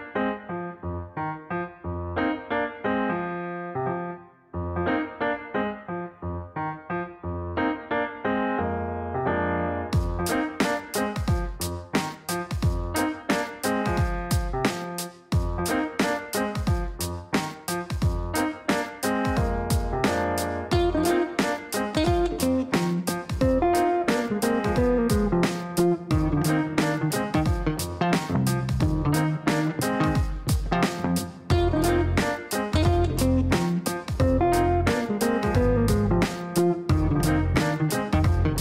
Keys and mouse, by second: 0.0-0.9 typing, 0.9 Down, 2.5-4.2 typing, 2.6 KP_Add, 5.9-6.7 typing, 6.8 Down, 6.9 Down, 7.4 Return, 8.8 click, 9.7 click, 11.5 click, 12.1 click, 13.4 click, 14.4-15.3 typing, 17.2-18.2 typing, 18.3 Down, 19.6 KP_Divide, 21.0 BackSpace, 21.6 KP_Enter, 23.0 click, 23.9 click, 27.5 click, 30.5 click, 32.0 click, 33.3 click.